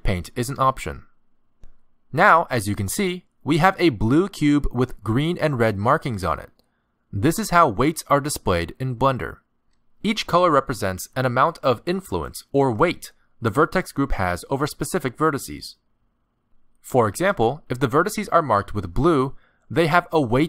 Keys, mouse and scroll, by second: 0.2 ctrl+Tab, 3.5 middle click, 12.9 middle click, 18.1 middle click.